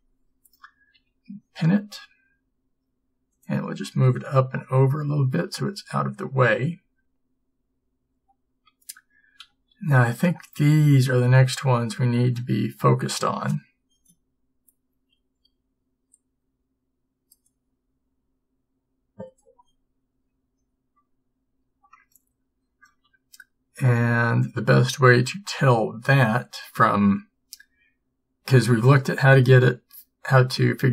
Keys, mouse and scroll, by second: 1.0 p, 2.4 g, 6.3 a.